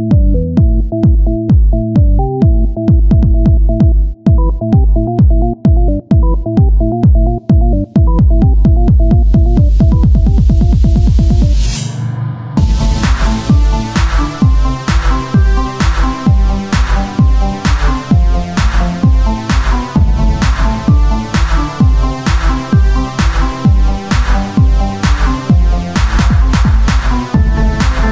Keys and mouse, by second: 8.0 shift+d, 9.8 r, 11.4-14.2 drag, 11.4 z, 13.9 Tab, 17.2 g, 19.3 click, 21.2 KP_1, 21.5 z, 22.2 a, 22.9 click, 24.8 c, 25.7 r, 27.4 z.